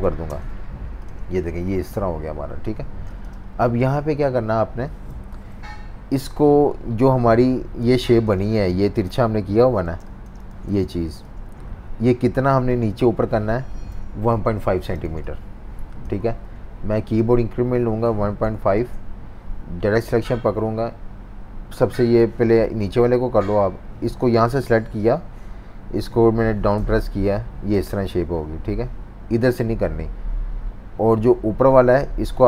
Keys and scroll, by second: 0.0 2, 0.3 Return, 2.9 v, 3.0 space, 5.1 super+-, 7.8 typing, 9.8-11.9 typing, 14.0 super+-, 14.1 super+-, 14.3 super+-, 15.0 z, 16.2 typing, 17.8-19.0 typing, 26.7 Page_Down.